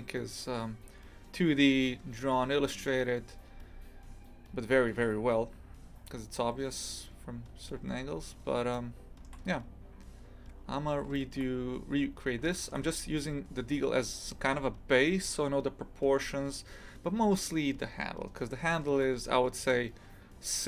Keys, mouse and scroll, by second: 7.8-8.7 scroll up 6, 8.7-10.5 shift+middle drag, 10.5 scroll down 6, 11.2-12.2 shift+middle drag, 12.2-12.5 scroll down 1, 12.5 shift+middle click, 12.7 scroll down 1, 12.9-15.9 scroll up 1.